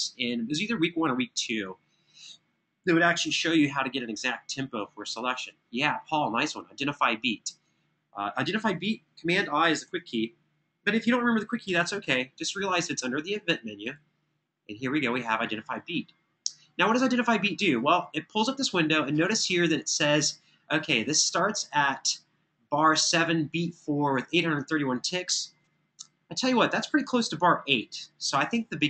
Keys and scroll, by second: 9.6 super+i, 11.5 super+..